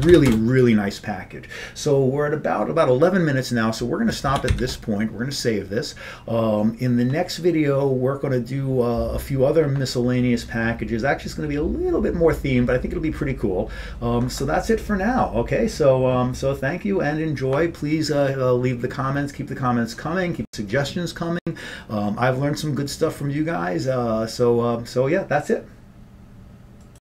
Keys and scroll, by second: 0.1 ctrl+x.